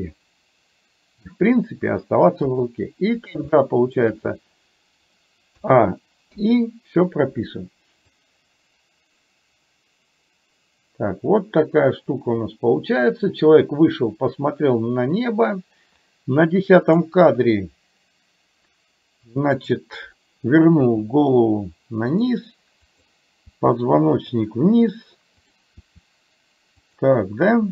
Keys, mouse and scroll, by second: 2.6 KP_3, 3.7 shift+middle click, 5.6 a, 6.4 i, 8.2-17.2 drag, 19.7 click, 20.9 r, 23.1 click, 23.6 r, 25.6 click, 26.9 r.